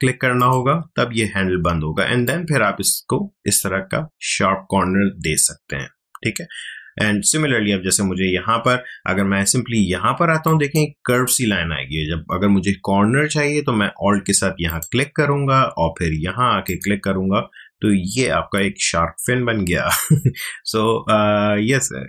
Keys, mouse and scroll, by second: 10.4 click, 11.7 ctrl+z, 14.7 alt+click.